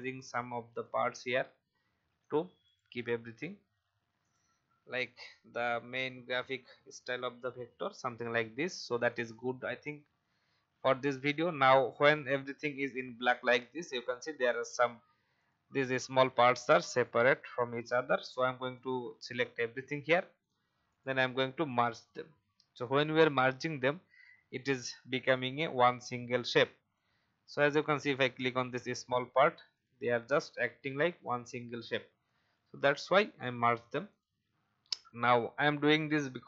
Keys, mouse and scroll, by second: 0.7 click, 1.4 shift+e, 2.1 click, 3.1 v, 3.5-4.0 alt+scroll down 1, 4.2 click, 8.4-9.1 alt+scroll down 1, 9.1 click, 10.0-10.4 scroll up 1, 10.7 alt+scroll down 1, 11.5-32.1 drag, 33.4 alt+scroll down 1, 34.1 click, 34.4-34.9 alt+scroll down 1, 34.9 click, 36.1-36.4 scroll up 1.